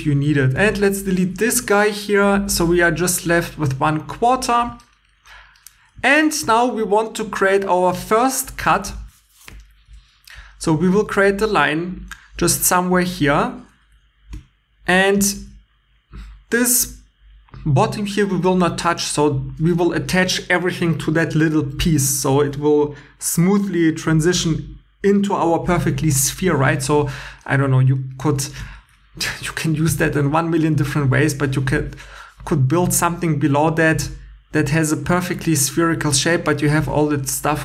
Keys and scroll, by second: 0.6 Tab, 1.2 x, 2.2 x, 10.9 shift+a, 35.1 2.